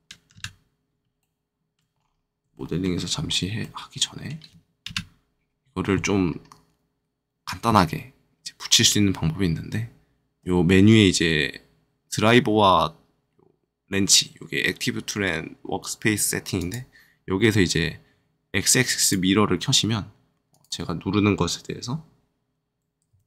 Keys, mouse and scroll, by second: 0.3 KP_1, 1.1 shift+middle click, 1.5 shift+middle click, 1.9 shift+scroll up 1, 2.5 shift+middle click, 3.0-3.5 scroll up 2, 3.5 middle click, 4.1 shift+middle click, 4.8 KP_1, 6.2-8.4 scroll down 1, 9.8-10.1 scroll down 1, 16.5 click, 18.9 click, 23.0 z.